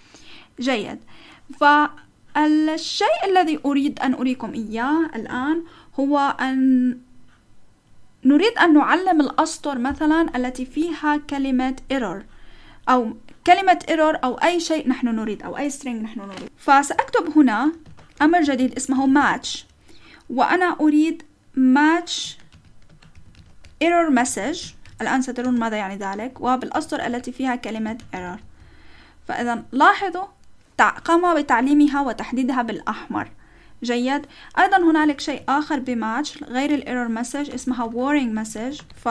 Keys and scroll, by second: 17.1-19.7 typing, 22.5-29.6 typing, 29.4 Return, 35.3 :, 35.7 Up, 35.9 Left, 36.4 Left, 36.9 Left, 37.2 Right, 37.5-39.1 typing.